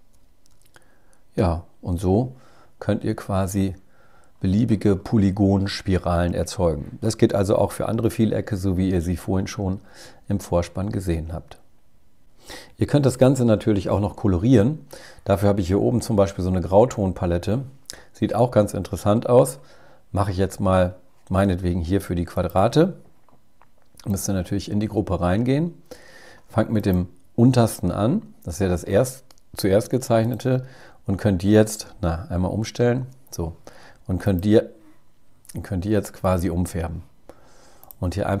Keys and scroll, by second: 32.4 x.